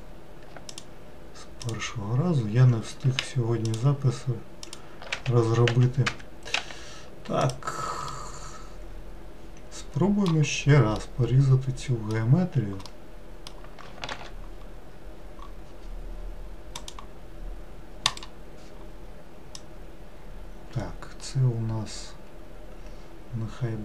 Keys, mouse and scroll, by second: 0.7 alt+click, 1.6 alt+click, 3.6 alt+shift+click, 4.6 alt+shift+click, 5.1 s, 7.5 x, 8.1-10.5 middle drag, 10.5-11.0 scroll down 1, 11.0-14.1 middle drag, 14.1 ctrl+r, 19.5 click.